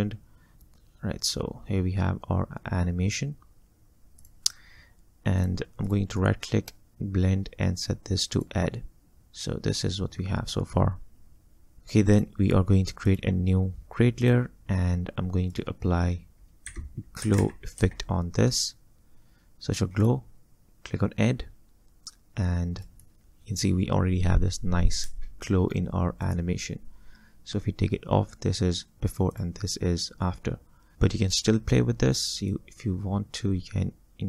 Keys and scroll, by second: 11.8 space, 16.7-18.3 typing, 23.2 space, 25.1 space.